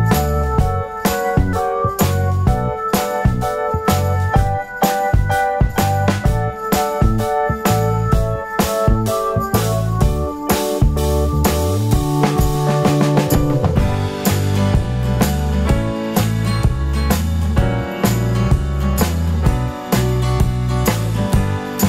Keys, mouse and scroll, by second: 1.8-2.9 drag, 5.7-7.6 drag, 8.4-18.2 drag, 11.8 alt+a, 12.0 `, 12.1 scroll down 2, 12.2 `, 12.5 scroll up 2, 12.6 `, 14.1 scroll down 1, 14.2 `, 14.4 middle click, 14.4-14.9 scroll up 1, 14.9 scroll down 1, 15.1 `, 15.6-16.1 scroll up 1, 16.6 scroll down 1, 16.8 `, 17.1-18.2 scroll up 1, 21.6-21.8 drag.